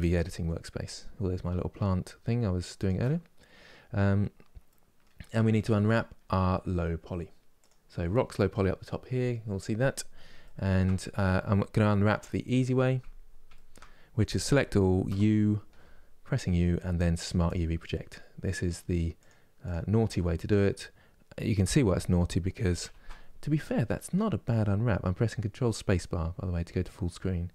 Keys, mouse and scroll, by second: 3.1 scroll down 3, 6.6-7.4 scroll up 4, 7.4 click, 10.1 shift+middle click, 10.7 scroll down 1, 11.8 KP_Decimal, 12.2-13.2 scroll down 18, 13.2 shift+middle click, 14.2 a.